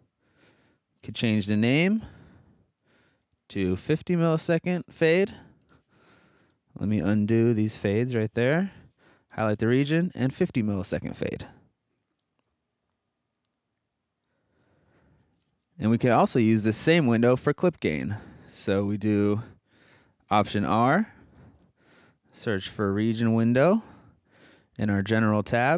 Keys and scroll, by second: 1.2 Left, 1.8 ctrl+Left, 2.9 alt+Right, 3.2 BackSpace, 4.1 5, 6.9 super+z, 20.4 alt+r, 22.3-24.0 typing.